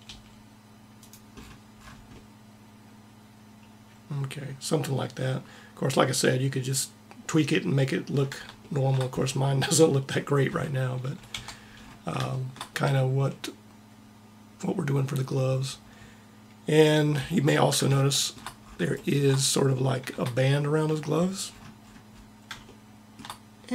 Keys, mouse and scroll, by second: 1.0 middle click, 10.7 a, 11.0 Tab.